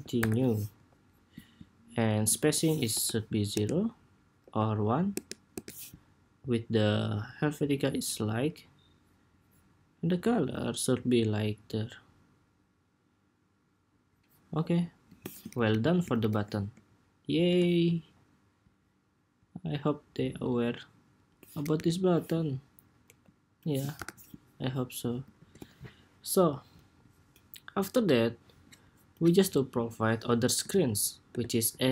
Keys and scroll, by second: 0.8 ⟲, 23.8 super+-, 25.1 super+s, 30.4 super+d, 31.0 super+r.